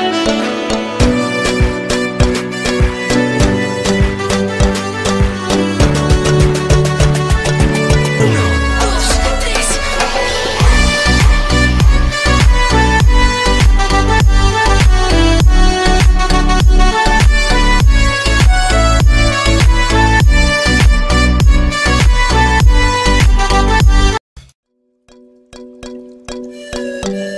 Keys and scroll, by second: 23.4 c.